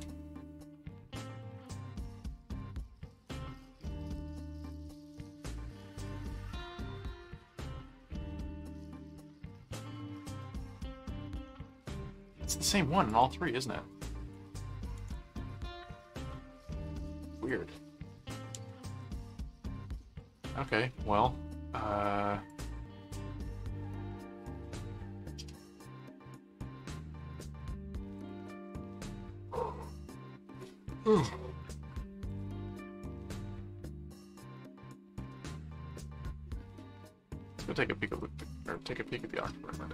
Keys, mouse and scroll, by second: 9.9-10.5 scroll up 2, 10.5 click, 11.0-11.4 scroll down 2, 12.1 click, 13.0 click, 14.1 ctrl+shift+t, 14.8 ctrl+w, 15.2 Tab, 17.3 click, 18.5 ctrl+w, 20.0 ctrl+w, 22.5 click, 28.2 click, 30.7 ctrl+w, 31.6 ctrl+w, 32.3 click, 33.0 middle click, 38.6 click.